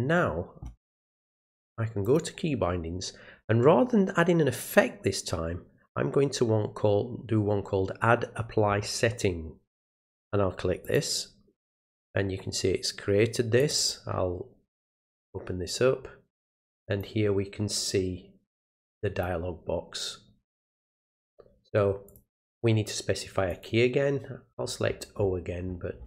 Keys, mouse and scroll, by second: 2.0 click, 10.8 click, 13.6 click, 13.8 click, 15.2-17.0 drag, 18.8 click, 22.1 click, 23.5 click, 24.5-24.8 scroll down 1, 25.1-25.4 scroll down 1, 25.7-26.0 scroll down 2.